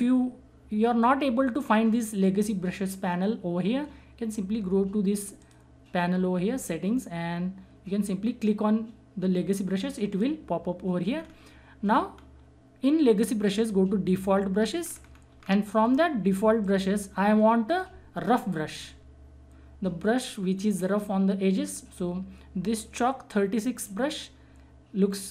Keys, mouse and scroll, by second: 5.3 click, 10.1 click, 11.1 scroll down 1, 14.8 scroll down 1, 16.6-23.3 drag, 23.8 click.